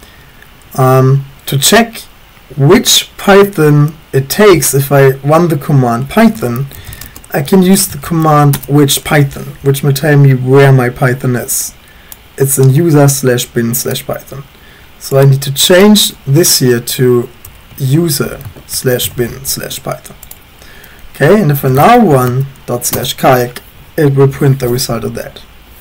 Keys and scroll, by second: 6.2-9.0 typing, 17.3-19.0 typing, 19.1 ctrl+s, 21.4-22.6 typing, 22.9 Return.